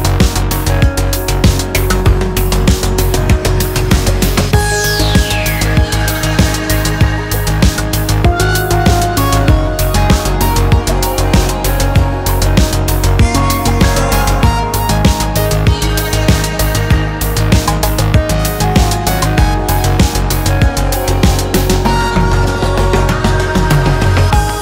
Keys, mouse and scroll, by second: 0.0-2.2 typing, 1.2 scroll down 2, 2.5 shift+middle click, 2.6-3.2 scroll up 5, 2.7 middle click, 3.2-9.3 typing, 3.4 middle click, 3.5 scroll up 1, 3.6 alt+shift+click, 3.7-4.0 scroll down 6, 3.9 shift+middle click, 5.0 alt+m, 5.2 scroll down 3, 5.3 shift+middle click, 5.3 scroll up 1, 5.5 click, 6.2 shift+click, 7.0 scroll down 3, 7.2 middle click, 7.3 scroll up 3, 7.4 middle click, 7.5 alt+click, 8.5 alt+click, 9.9 middle click, 10.1 alt+Left, 10.2 middle click, 10.5 shift+middle click, 10.8 alt+shift+click, 10.9 middle click, 11.1 shift+middle click, 11.2 alt+shift+click, 11.3 middle click, 11.4 scroll down 3, 11.6-12.2 scroll up 4, 12.0 middle click, 12.2 alt+shift+click, 12.3 scroll down 1, 12.3 shift+middle click, 12.8 KP_7, 13.0 s, 13.5 shift+middle click, 13.8-15.0 scroll up 23, 14.1 KP_7, 14.2 shift+middle click, 14.3 shift+middle click, 14.6 g, 14.9 shift+middle click, 15.0 g, 15.4-15.9 scroll down 41, 15.9 Tab, 16.0 click, 16.3 Tab, 16.3 scroll up 1, 16.4 Tab, 16.4 a, 16.6 s, 17.1 scroll down 5, 17.2 scroll up 4, 17.4 Tab, 17.4 middle click, 18.2-24.3 typing, 18.3 middle click, 18.6 Tab, 18.7 shift+middle click, 18.8 scroll up 1, 21.6 scroll up 5, 21.7 shift+middle click, 22.1 click, 23.9 scroll down 3, 24.0 shift+middle click, 24.0 scroll up 3.